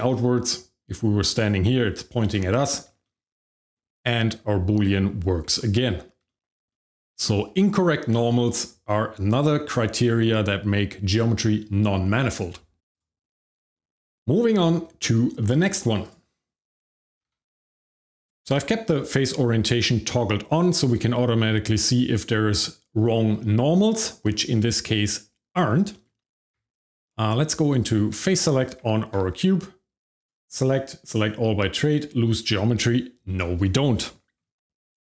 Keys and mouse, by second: 0.1-1.7 shift+middle drag, 3.2 shift+middle click, 5.4 Tab, 6.2 shift+middle drag, 6.5 middle click, 7.2 shift+middle click, 7.5 middle drag, 12.8 Tab, 12.9 click, 13.7 middle click, 14.4 middle drag, 16.0 click, 16.8 g, 16.9 x, 17.5 click, 18.0 shift+click, 18.4 q, 20.9-21.2 shift+drag, 21.2-25.6 shift+middle drag, 25.9 middle click, 26.2 middle click, 26.6 Tab, 27.9 Tab, 28.3 click, 28.8 Tab, 30.0 click, 30.3-32.2 drag.